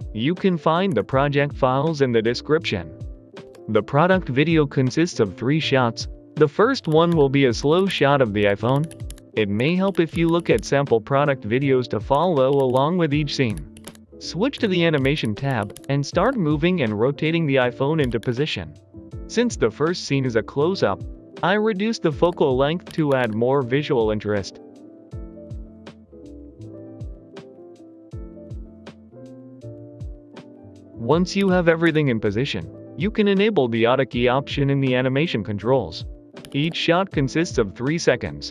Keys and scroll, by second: 0.8 Escape, 6.7-11.0 typing, 8.3 Return, 9.5 Escape, 12.0 Escape, 12.2-16.6 typing, 17.9-18.6 typing, 22.1 3, 22.1 5, 22.1 Return, 22.8 g, 23.0 z, 25.4-26.9 typing, 28.7-29.9 typing, 29.1 Escape, 29.5 Escape, 31.3 g, 31.7 Escape, 36.3 g, 36.5 Return.